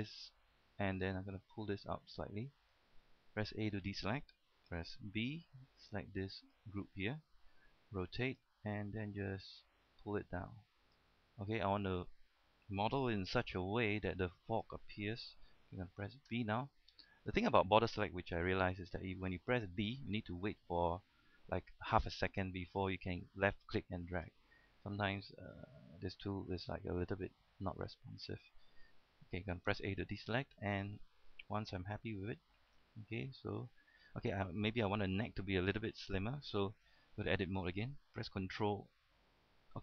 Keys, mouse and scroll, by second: 0.2-3.1 drag, 3.8 a, 5.4 b, 5.8-7.1 drag, 8.0 r, 8.5-12.2 drag, 13.0-13.5 typing, 14.2-15.2 drag, 16.6 typing, 17.8 right click, 20.1 b, 23.1-29.5 drag, 29.5 a, 30.5 middle click, 32.2 Tab, 32.5-32.8 scroll up 1, 32.8-34.5 middle drag, 34.5-34.9 scroll up 1, 34.9 scroll down 1, 35.1-36.6 middle drag, 37.2 Tab, 37.7-38.6 scroll up 1, 39.7 scroll up 1.